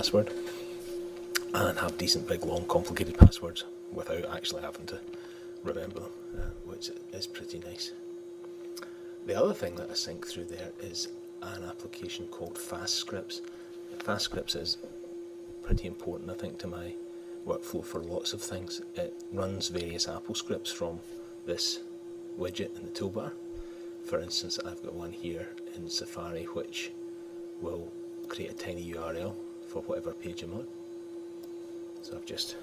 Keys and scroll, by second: 5.8 super+Tab.